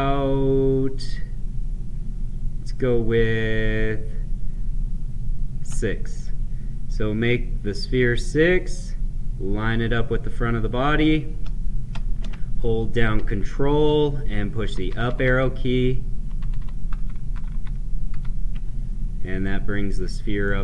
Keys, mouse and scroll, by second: 6.1-13.1 drag, 13.1 ctrl+Up, 19.4-20.6 right drag.